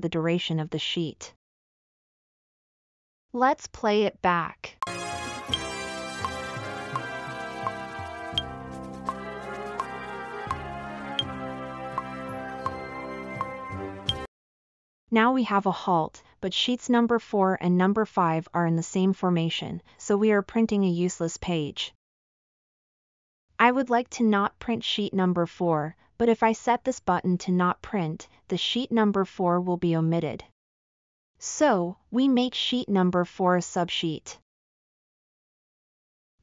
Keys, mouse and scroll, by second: 4.8 space.